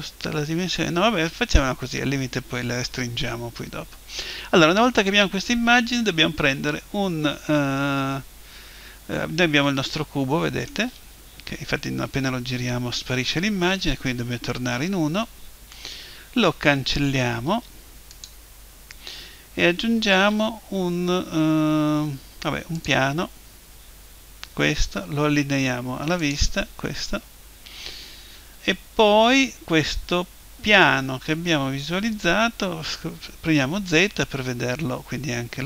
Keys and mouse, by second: 9.8-11.7 middle drag, 13.2 KP_1, 17.5 Delete, 20.2 shift+a, 26.2 click, 28.2-33.9 middle drag, 33.9 z.